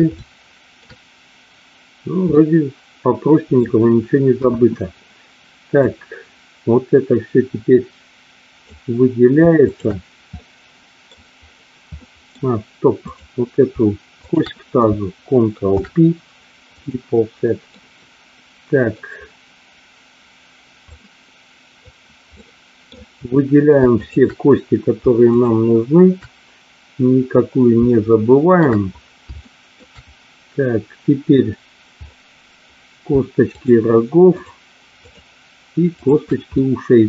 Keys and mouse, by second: 0.1 shift+middle click, 2.3-3.6 middle drag, 4.3 KP_1, 5.8-8.6 drag, 9.6 shift+click, 10.3 middle click, 12.0 middle click, 12.9 click, 14.2 shift+click, 15.7 ctrl+p, 17.7-18.9 middle drag, 20.9-21.9 drag, 22.4 middle click, 23.9 shift+click, 25.3 shift+click, 28.0 shift+middle click, 29.4 shift+middle click, 33.4 shift+click, 34.3 shift+click, 35.9 shift+click, 36.5-37.0 middle drag.